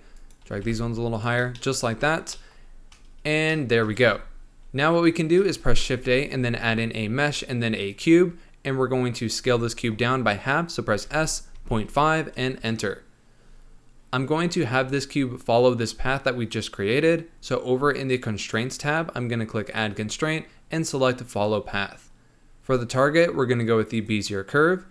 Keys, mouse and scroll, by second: 0.1 click, 0.5 g, 1.4 scroll down 1, 1.5-3.0 shift+middle drag, 3.0-3.4 scroll down 2, 3.4 shift+middle click, 4.0 Tab, 5.4 shift+a, 10.9 s, 18.3 click, 19.6-22.7 drag, 22.8-24.9 drag.